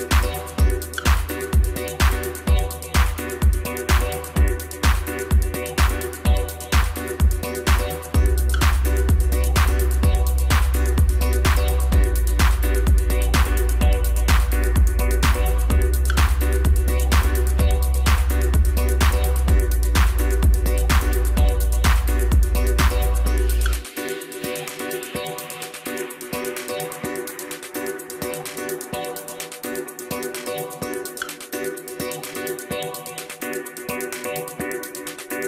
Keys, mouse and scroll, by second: 0.3 shift+click, 1.4-1.9 ctrl+KP_Add, 3.3 drag, 3.9-5.1 drag, 5.6 click, 6.9 click, 8.1 shift+click, 9.0 shift+click, 9.6 shift+click, 10.9 shift+click, 12.1 shift+click, 13.2-13.9 ctrl+KP_Add, 15.1 click, 15.6-16.8 drag, 17.0 scroll down 2, 17.2-19.4 middle drag, 19.4 KP_Divide, 20.6 click, 20.9 scroll down 2, 21.6 KP_1, 22.2 Tab, 22.5-23.6 middle drag, 23.6-25.4 drag, 25.4 scroll up 2, 26.4 KP_1, 27.2 scroll up 2, 27.9-30.0 middle drag, 30.0 KP_1, 31.8 shift+d.